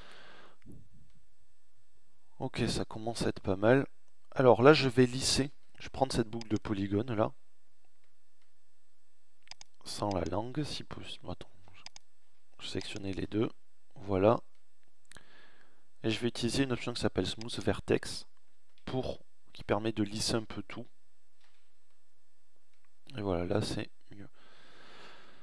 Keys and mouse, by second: 20.4 Tab.